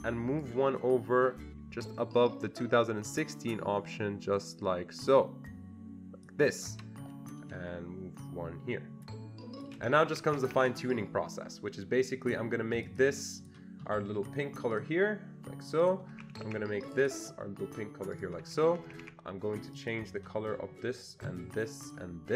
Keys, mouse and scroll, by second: 0.7-6.3 ctrl+drag, 8.2-10.5 ctrl+shift+drag, 10.1 Escape, 10.3 Escape, 10.5 Escape, 10.6 Escape, 12.9 click, 13.0 double click, 13.4 double click, 13.5 click, 14.7 click, 15.8 click, 16.2 Escape, 16.4 Escape, 16.9 click, 16.9 Escape, 17.0 double click, 18.1 click, 18.4 Escape, 18.7 Escape, 18.9 Escape, 19.0 Escape, 19.8 click, 21.9 ctrl+click.